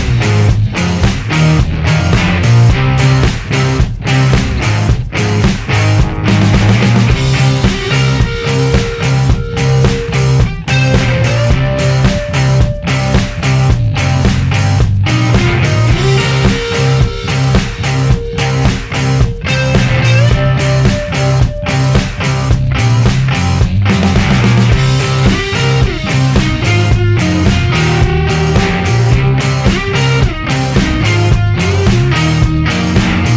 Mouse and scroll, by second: 1.1 click, 2.4-4.3 drag, 4.5 click, 4.7 right click, 5.4-7.7 right drag, 8.4 click, 8.9 right click, 10.4 click, 11.4 right click, 13.1-14.3 drag, 15.3-18.3 drag, 18.7 right click, 20.0 click, 22.0 right click, 23.3 click, 23.8 right click, 25.0 right click, 26.5-28.0 right drag, 29.2-31.1 drag, 31.9 click.